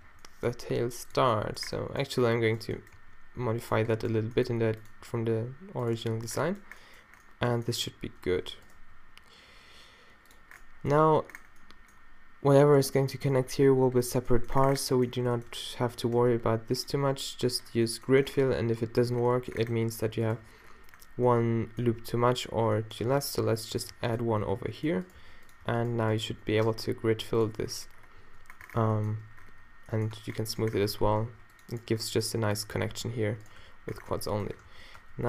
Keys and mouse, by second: 0.0 z, 0.5 g, 1.2 z, 2.2 middle drag, 2.5 middle drag, 3.0 g, 4.5 g, 5.1 s, 8.7 e, 8.8 s, 14.4 middle click, 14.7 middle click, 15.4 middle click, 15.8 middle click, 22.0 a, 23.1 ctrl+r, 24.1 click, 24.4 d, 25.2 d, 26.7 space, 27.8 middle click, 28.4 z, 28.7 z, 29.5 q, 30.2 Tab, 30.9 Tab, 31.3 ctrl+r, 32.0 click, 33.0 q, 33.6 q, 34.1 Tab, 34.7 ctrl+r, 35.0 Tab.